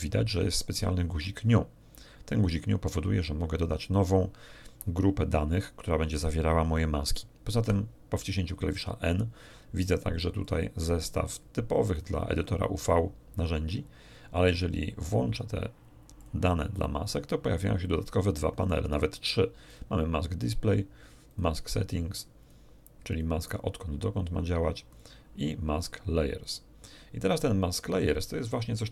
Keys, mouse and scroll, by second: 7.6 n, 10.4 click, 11.0 click, 11.9 click, 16.2 click, 19.6 click, 20.4 click, 21.2 click, 22.4 click, 23.0 click, 24.8 click, 25.8 click, 26.4 click.